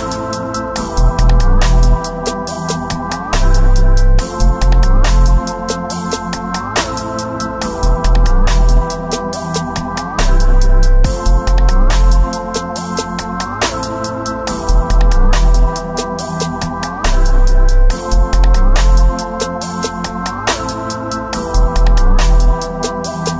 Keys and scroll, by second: 2.6 ctrl+alt+z, 4.0 space, 4.7 space, 5.1 space, 5.3 space, 7.6 space, 7.9 space, 9.2 space, 9.9 alt+space, 10.9 space, 11.2 ctrl+z, 11.2 space, 11.6 space, 13.3 space, 13.6 space, 14.2 space, 15.4 space, 18.8 alt+space, 20.7 space, 21.4 ctrl+s, 22.4 ].